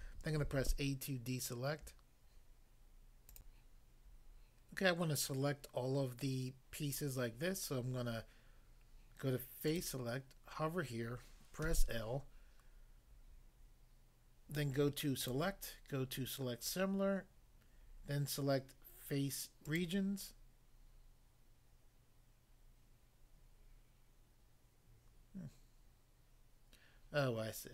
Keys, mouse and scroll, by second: 0.4 a, 3.3 click, 3.5 click, 9.6 click, 9.8 click, 11.7 l, 15.3 click, 19.7 click, 19.8 click.